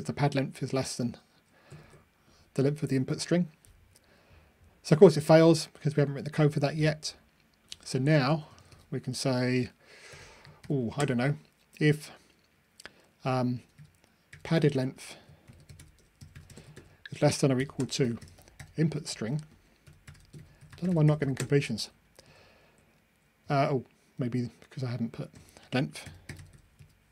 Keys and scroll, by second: 0.8 super+F9, 1.8 ctrl+r.